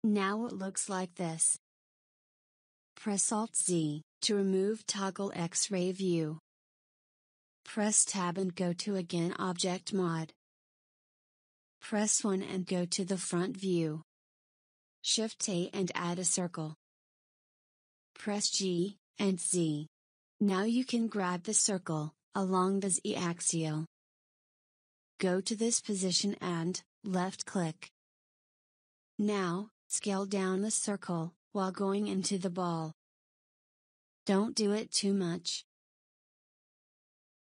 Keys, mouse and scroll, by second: 1.5-4.1 middle drag, 4.1 alt+z, 8.8 Tab, 12.1 KP_1, 16.3 shift+a, 21.2 g, 31.3 s, 33.9-34.5 middle drag, 34.5 s, 36.5 Tab.